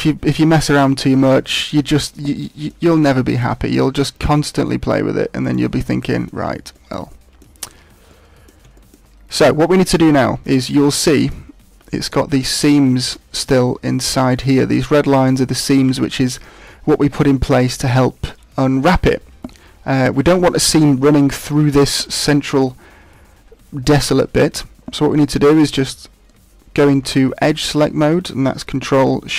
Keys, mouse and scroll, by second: 0.5 middle click, 3.3 right click, 3.6 middle click, 4.6 g, 5.7 middle click, 6.7 shift+middle click, 7.0 middle click, 8.1 middle click, 8.7 shift+middle click, 9.4 middle click, 10.2 middle click, 11.0 shift+middle click, 25.5 right click, 26.8 ctrl+Tab.